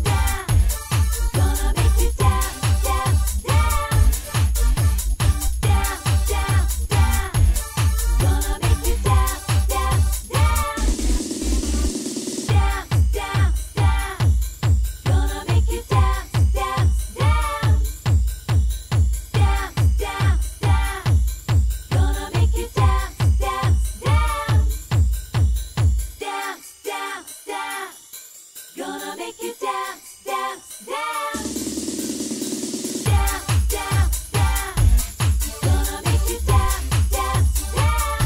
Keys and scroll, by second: 1.8-6.3 typing.